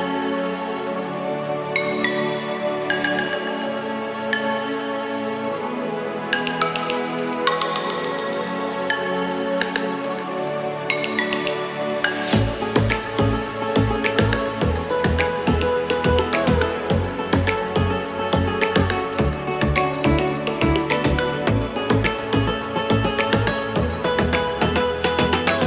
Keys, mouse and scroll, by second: 2.8 s, 3.0 z, 4.2 g, 5.2 x, 6.1 g, 8.9 s, 9.3 g, 10.3 g, 16.2 ctrl+j.